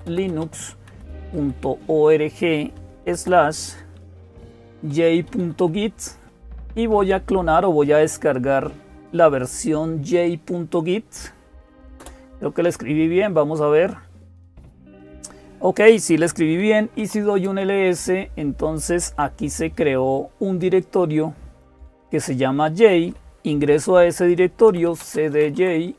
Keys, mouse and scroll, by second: 0.0-25.9 typing, 11.8 Return, 20.6-23.5 drag.